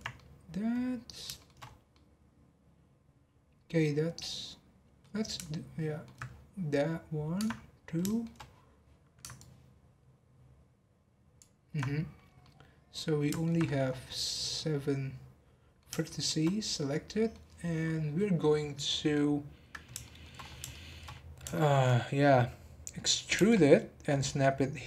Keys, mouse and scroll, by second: 1.6 scroll up 1, 1.9-4.7 middle drag, 4.7-5.0 scroll down 1, 5.0-6.2 middle drag, 6.2-7.3 scroll down 7, 7.3 scroll down 1, 7.5-8.0 scroll up 1, 8.0 shift+middle click, 8.3-8.8 scroll down 1, 9.4 ctrl+click, 12.4-13.6 middle drag, 13.6 scroll up 4, 14.2 scroll down 5, 14.5-20.4 middle drag, 20.4-21.2 scroll up 4, 20.7 shift+middle click, 21.5 shift+middle click, 21.9 scroll up 1, 22.6-23.3 scroll up 4, 23.3 e.